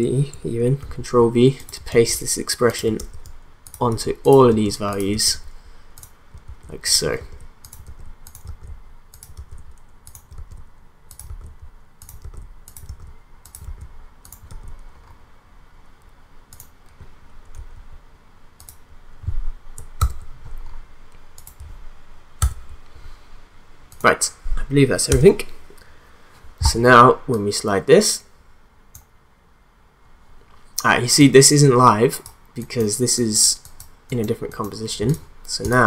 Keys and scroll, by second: 0.8 ctrl+v, 5.3 v, 6.4 ctrl+v, 7.2 ctrl+v, 8.6 v, 9.4 ctrl+v, 10.5 v, 11.3 ctrl+v, 13.1 v, 13.6 ctrl+v, 17.6 ctrl+v, 20.0 ctrl+v, 22.4 ctrl+v.